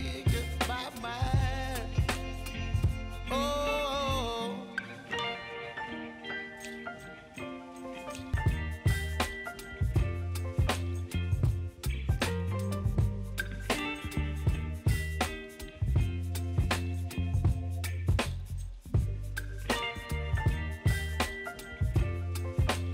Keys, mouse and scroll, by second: 2.1-3.4 scroll down 1, 7.2 ctrl+click, 8.8 s, 9.9 click, 10.6 scroll down 1, 14.1 -, 15.7-22.4 drag.